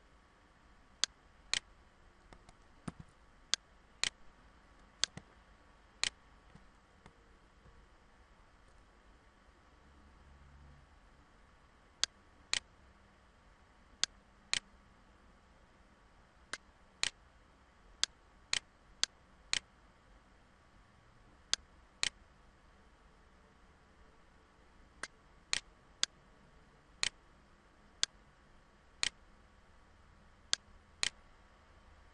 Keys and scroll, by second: 2.4 ctrl+z, 3.7 ctrl+z, 6.9 ctrl+-.